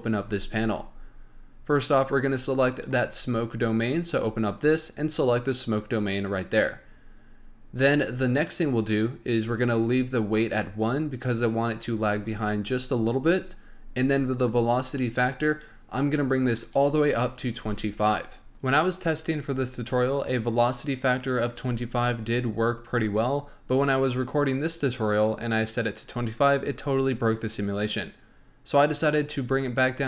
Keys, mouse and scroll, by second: 0.3-2.7 scroll down 4, 2.7-5.7 drag, 15.4-18.4 drag.